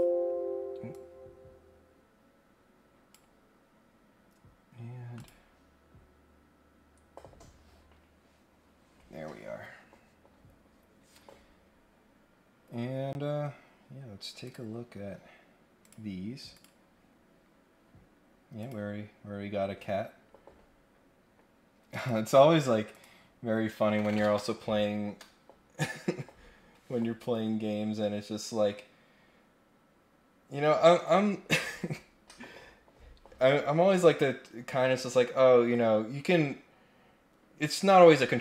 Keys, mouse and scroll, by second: 0.9-3.1 drag, 5.1 click, 14.4 click, 15.8 click, 16.5 click, 18.5 click, 19.5-20.2 scroll down 2, 20.2-20.6 scroll up 2, 21.1 scroll down 1, 21.9 click, 22.9 click.